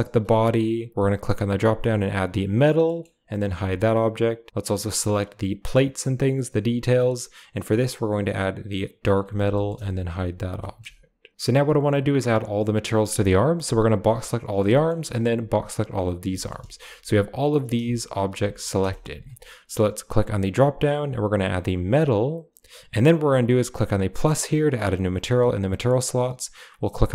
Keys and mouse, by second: 0.9-2.3 drag, 2.8 click, 3.3 h, 4.6 click, 6.9-9.0 drag, 9.5 shift+middle click, 10.0 h, 10.6 shift+middle click, 11.3 a, 13.5 b, 14.6-15.1 shift+middle drag, 15.2 b, 16.3 shift+middle click, 16.7 g, 18.0 shift+click, 18.3 g, 20.2-21.9 drag, 24.1-26.5 drag.